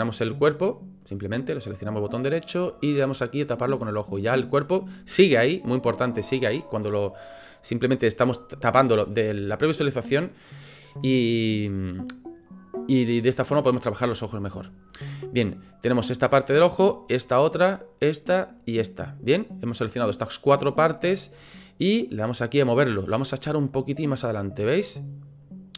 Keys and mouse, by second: 1.0 right click, 1.9 right click, 3.5 right click, 4.2 middle click, 11.2-11.7 middle drag, 14.1-14.6 shift+drag, 15.9 click, 16.8 shift+click, 17.9 shift+click, 18.6 shift+click, 22.1 click, 22.6-22.9 middle drag, 23.7-25.7 drag.